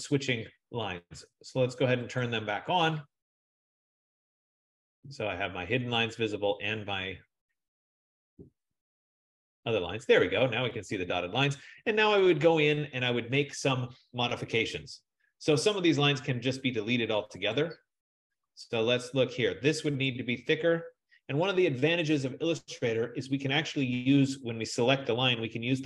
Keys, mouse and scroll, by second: 2.6 click, 17.6 click, 20.5 click.